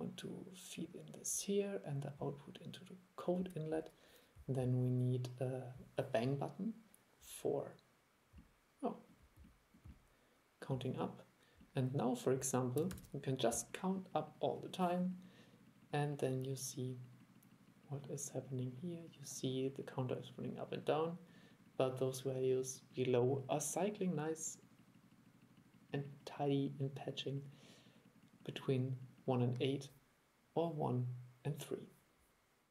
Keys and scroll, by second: 13.0 super+e.